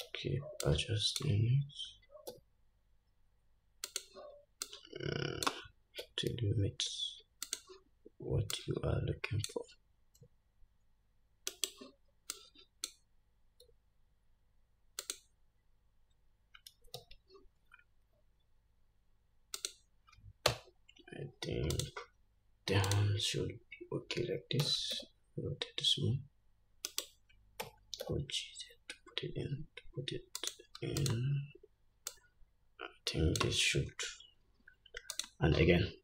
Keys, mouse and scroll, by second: 0.3 alt+z, 2.5 s, 4.8-7.8 drag, 6.2 s, 8.7-15.3 drag, 10.4 s, 13.8 s, 17.2 alt+z, 19.8 click, 20.7 Tab, 21.1-22.0 scroll down 1, 22.0 click, 23.1 click, 24.8 r, 27.8 g, 31.2 click, 32.3-35.5 drag.